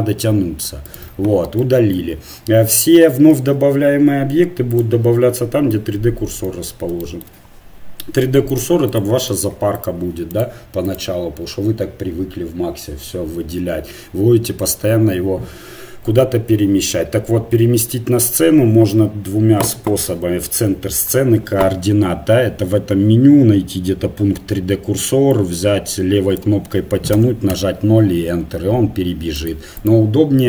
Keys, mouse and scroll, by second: 3.4 shift+a, 8.5-14.1 drag, 25.3-30.4 drag.